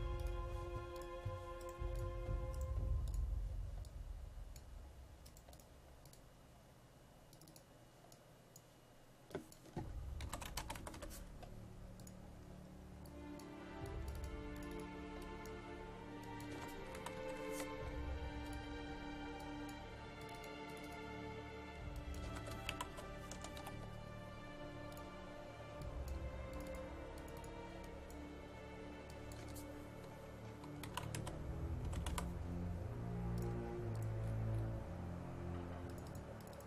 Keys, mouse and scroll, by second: 1.6 right click, 2.0 click, 2.6 right click, 3.1 click, 5.3 right click, 5.5 click, 10.0-11.5 typing, 12.0 click, 16.3-18.0 typing, 18.5-21.9 drag, 22.0-24.2 typing, 24.9-29.0 drag, 30.6-32.6 typing, 33.4 click, 34.2-35.9 scroll down 1, 35.9-36.6 drag.